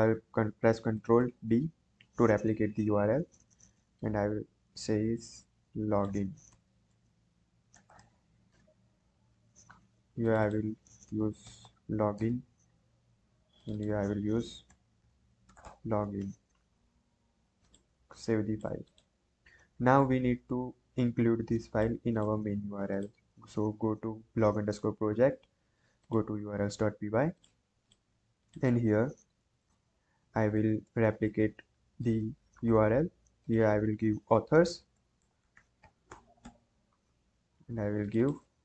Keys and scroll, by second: 1.2 ctrl+d, 6.5-8.5 typing, 11.0-12.1 typing, 12.1 Return, 14.7-16.1 typing, 16.2 ctrl+s, 29.6 Return, 29.6 ,, 30.2 \, 30.7 BackSpace, 31.9 ctrl+d, 34.6-36.9 typing.